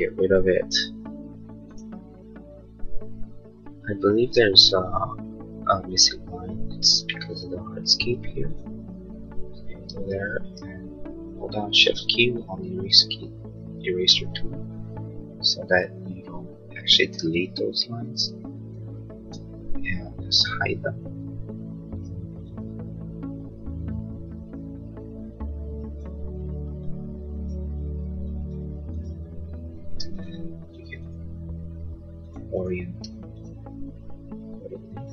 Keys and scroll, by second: 10.1 e, 30.1 space.